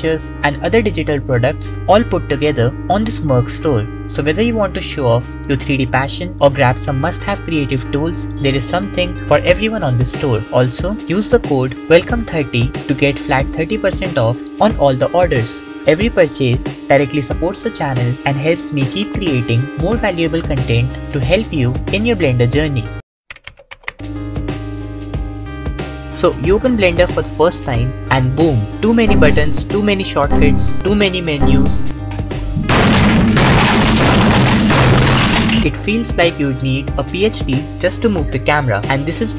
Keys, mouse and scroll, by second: 1.4 click, 4.4 Tab, 8.0 r, 8.0 z, 17.2 Tab, 17.4-19.3 drag, 19.4 Tab, 19.4 a, 19.5 KP_7.